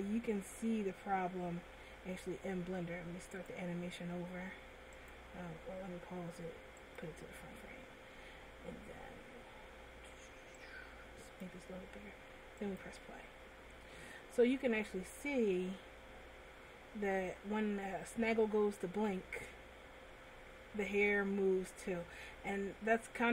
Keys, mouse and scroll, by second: 5.4 click, 5.6 click, 6.9 click, 12.8 click.